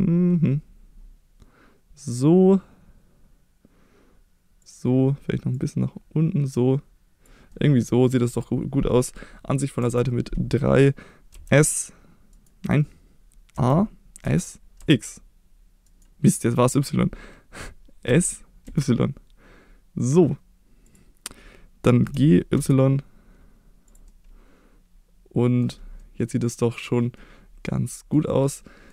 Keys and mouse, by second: 4.6 click, 5.5-7.2 drag, 7.5 middle click, 9.8 KP_3, 11.3 s, 12.3 right click, 13.5 a, 14.2 s, 14.8 x, 15.8 right click, 18.1 s, 18.6 y, 20.8 click, 22.0 g, 22.5 y, 23.9 click, 24.1-25.6 middle drag, 26.0 middle click, 26.7 click, 27.2 middle click, 28.6 middle click.